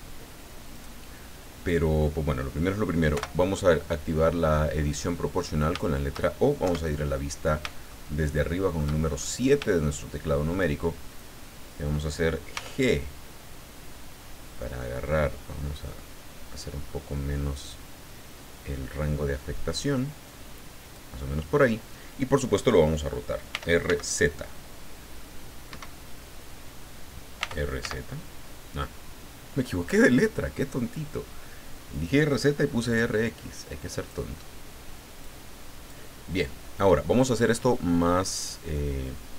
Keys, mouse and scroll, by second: 0.7 right click, 3.1 o, 4.5-4.8 scroll down 2, 4.9 middle click, 6.7 KP_7, 7.9-8.9 shift+middle drag, 9.1-9.6 shift+scroll up 4, 9.8 shift+middle click, 12.5 g, 15.0-15.7 scroll up 4, 20.8 click, 23.5 r, 23.9 x, 25.7 Escape, 27.4 r, 27.8 z, 30.2 click, 31.9-34.3 drag, 35.2 click.